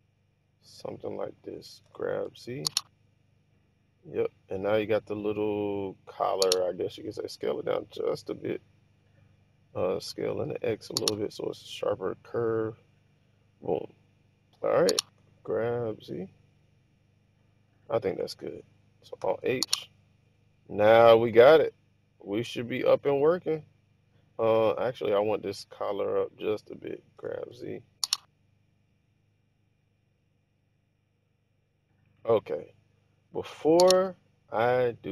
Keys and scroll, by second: 1.9-2.3 typing, 7.3 typing, 10.1-10.8 typing, 15.2-16.0 typing, 19.3 alt+h, 27.2 g, 27.6 z.